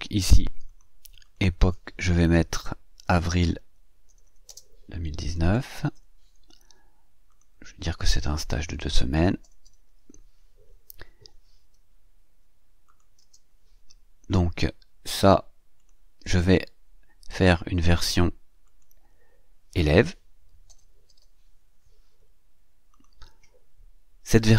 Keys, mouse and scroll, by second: 0.5 click, 1.1 click, 2.7-5.8 typing, 7.1 click, 7.9-10.2 typing, 12.7 click, 13.0 space, 15.6 click, 18.5 click, 20.1-21.5 typing, 22.7 click.